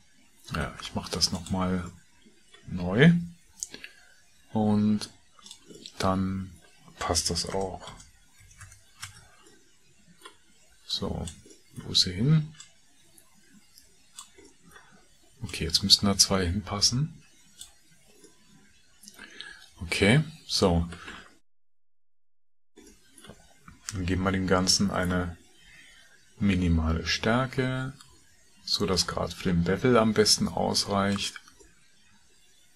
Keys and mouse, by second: 0.6 shift+a, 2.0 middle click, 3.4 s, 22.1 KP_Decimal, 23.0 middle click, 24.8 middle click, 26.2 e.